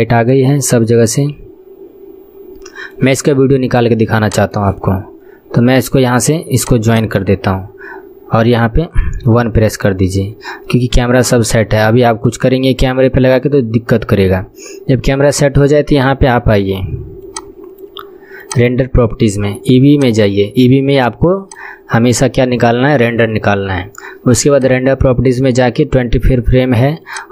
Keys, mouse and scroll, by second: 4.3-6.8 drag, 6.2-9.3 right drag, 9.3 KP_1, 9.9 scroll down 1, 10.8-11.9 middle drag, 11.9 scroll up 1, 13.1 scroll down 1, 13.5-17.4 middle drag, 17.4-23.1 drag, 24.7-27.3 drag.